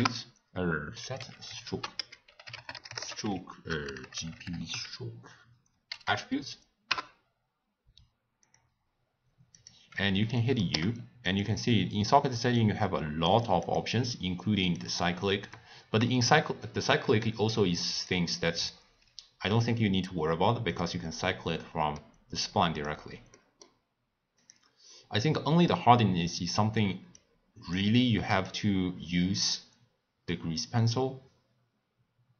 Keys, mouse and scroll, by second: 1.5 x, 1.6 ctrl+a, 3.8 BackSpace, 4.0 BackSpace, 4.3 BackSpace, 4.4 BackSpace, 6.0 Down, 9.5 click, 10.3 middle click, 10.7 u, 15.1 click, 16.6-18.0 middle drag, 18.0 click, 18.6 click, 20.7 click, 21.6-22.4 middle drag, 22.4 click, 23.3-24.8 middle drag, 24.8 click, 25.5 click, 27.1 click, 28.4 click.